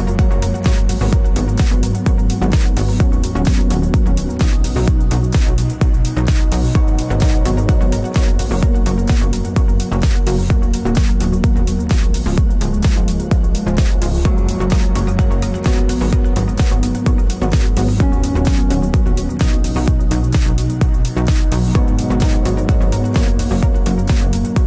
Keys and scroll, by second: 8.3 ctrl+s.